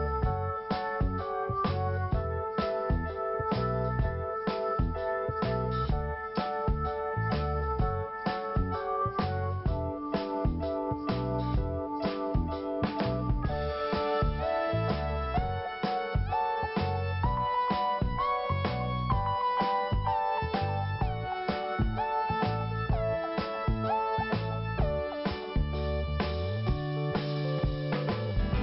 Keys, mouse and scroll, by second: 1.2 click, 8.7 click, 10.3 click, 12.9 click, 15.7 click, 17.4 click, 19.7-20.4 scroll down 2, 21.0 click, 23.5 click, 23.6 click, 25.2 click.